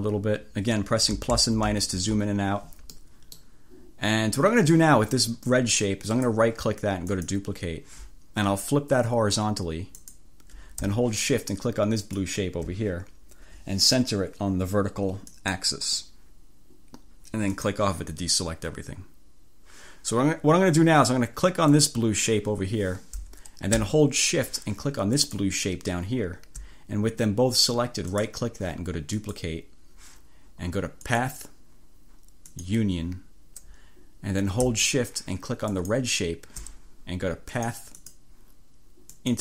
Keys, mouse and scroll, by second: 1.2 -, 1.4 =, 2.1 -, 3.0 click, 6.2-7.6 drag, 10.1 click, 12.0 shift+click, 15.4 click, 17.6 click, 21.7 click, 25.3 shift+click, 28.2 right click, 29.3 click, 31.2 click, 32.6 click, 35.8 click, 37.6 click, 38.0 click, 39.2 click.